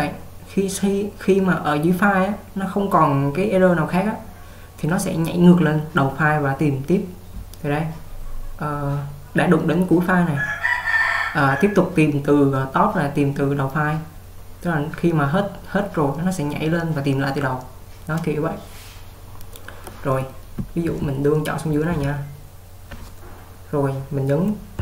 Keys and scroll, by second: 20.7-22.2 typing.